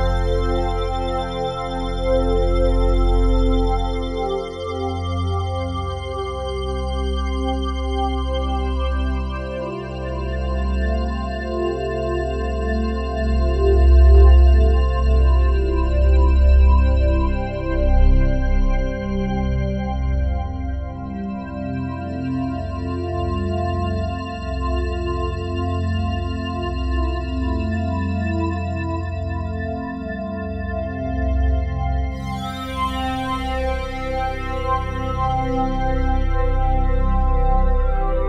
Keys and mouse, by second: 0.4 click, 1.5-2.6 drag, 1.9 space, 2.6 space, 3.1 space, 5.3 space, 6.2-8.0 drag, 11.8 click, 12.3-17.2 drag, 18.2-21.5 drag, 27.0 click, 28.2 click, 29.5-31.5 drag, 31.5 space, 31.9 space, 33.9 space, 35.6 ctrl+s.